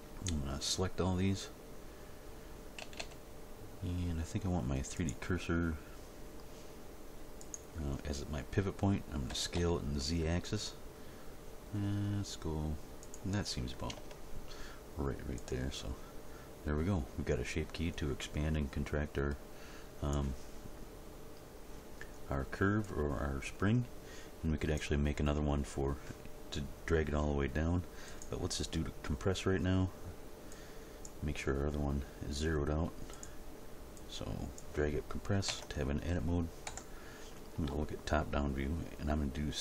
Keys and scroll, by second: 2.8 a, 9.3 s, 9.5 z, 14.0 Tab, 35.5 Tab, 36.7 Home.